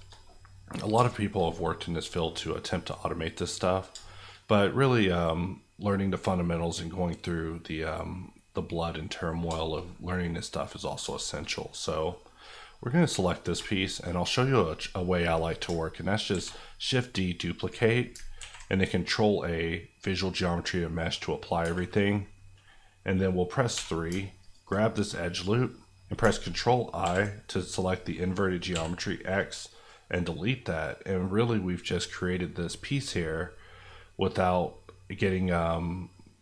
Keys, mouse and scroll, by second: 2.4 scroll down 1, 2.6-10.8 middle drag, 12.4 click, 12.8 middle click, 16.3 shift+d, 17.6 right click, 18.4 ctrl+a, 19.9 click, 20.8 middle click, 21.6 Tab, 21.8 middle click, 23.7 3, 24.4 alt+click, 25.0-25.5 scroll up 1, 25.5 middle click, 27.0 ctrl+i, 28.7 x, 29.6 click, 30.2 middle click, 31.3 scroll up 1, 32.0 middle click, 32.2-33.4 scroll down 1, 33.4 middle click, 34.8 scroll down 1, 35.0 middle click.